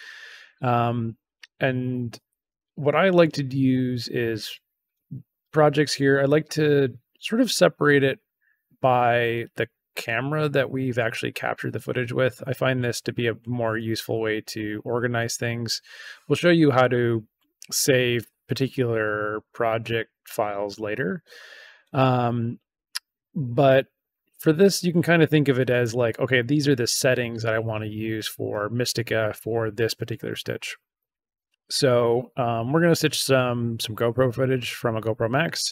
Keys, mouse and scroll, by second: 26.0 click.